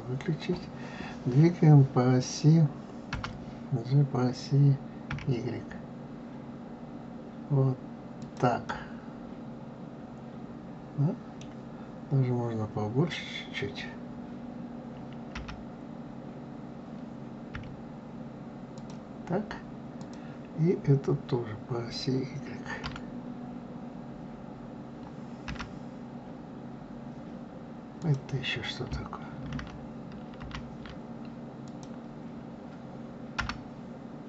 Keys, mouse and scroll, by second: 3.1 g, 8.7-11.7 middle drag, 15.4 g, 20.0 click, 22.9 y, 25.5 g, 29.6 ctrl+z, 30.4 ctrl+z, 31.6 click, 33.4 g.